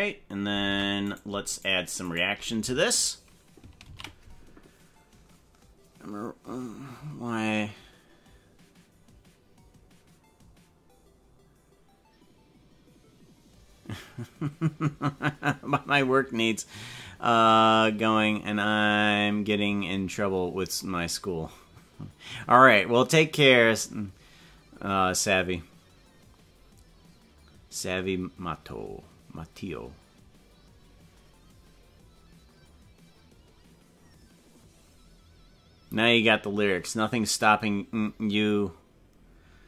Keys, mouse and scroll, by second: 1.1 right click, 2.3 shift+right click, 3.9 ctrl+s.